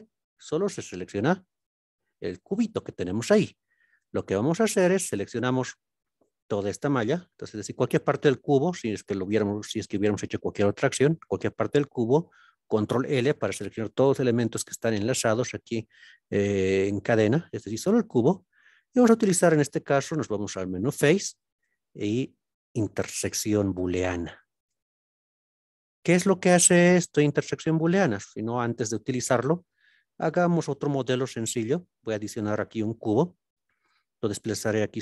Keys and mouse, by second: 1.2 g, 3.1 click, 5.9-6.3 middle drag, 7.4 click, 9.7 click, 10.3 click, 11.1 click, 12.6 ctrl+l, 20.5-25.8 drag, 29.1 Tab, 30.8 shift+a, 33.5 g, 34.7 x.